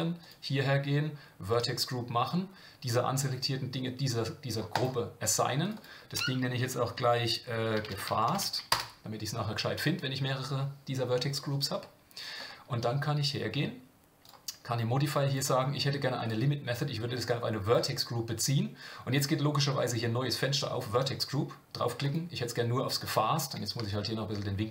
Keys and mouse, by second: 0.2-5.7 drag, 5.8-9.7 drag, 14.2 click, 15.3 drag, 16.2-17.7 drag, 21.0-22.1 drag, 23.9-24.7 shift+drag.